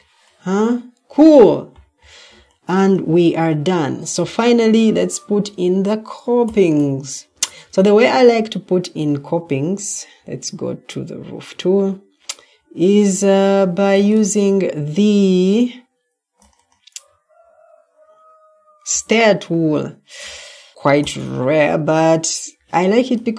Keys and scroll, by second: 7.3 Escape.